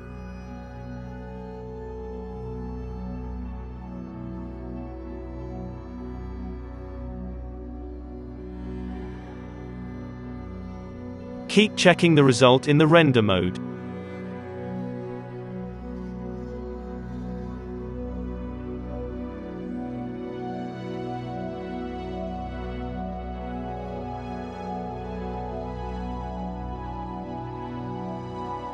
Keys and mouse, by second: 0.7 click, 1.0-12.7 typing, 3.3 click, 4.2 alt+a, 4.5 click, 4.9 alt+a, 5.0 middle click, 5.4 click, 6.0 middle click, 7.6 click, 9.7 ctrl+z, 12.0 alt+a, 13.0 click, 15.5 shift+click, 15.9-20.4 typing, 16.2 alt+a, 16.3 click, 16.8 alt+a, 18.2-19.4 drag, 19.4 middle click, 20.1 alt+a, 20.2 click, 20.8-22.4 middle drag, 22.6 click, 22.7 middle click, 22.8 click, 23.1-28.6 typing, 23.3 middle click, 24.4 middle click, 25.9 alt+a, 26.8 click, 27.0 alt+a, 27.3 middle click, 27.5-28.6 drag, 28.6 middle click.